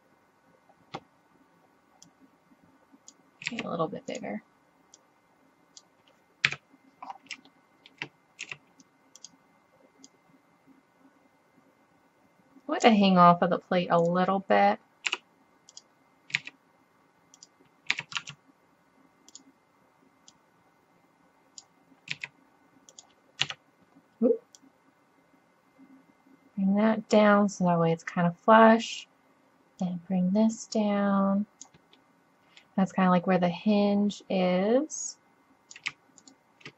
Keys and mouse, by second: 2.4-3.5 drag, 3.5 s, 5.0-6.5 drag, 6.5 KP_7, 7.2 middle click, 8.5 s, 14.1-14.5 drag, 15.1 g, 16.4 s, 17.9 s, 20.5 click, 22.1 s, 22.9 click, 23.5 KP_3, 29.0-29.8 middle drag, 32.0-32.4 middle drag, 33.8 middle click, 34.2 click, 36.2-36.7 drag.